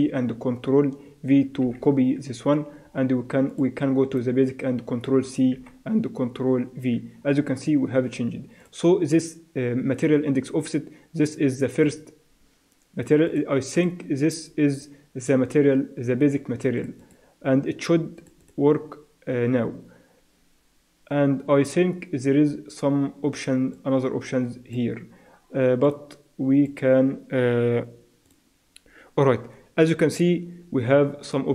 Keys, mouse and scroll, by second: 1.7 ctrl+v, 3.5-5.4 drag, 5.5 ctrl+c, 6.8 ctrl+v, 8.6-10.5 drag, 11.9-16.6 drag, 16.8-20.3 drag, 23.7-25.6 drag, 25.9-27.8 drag.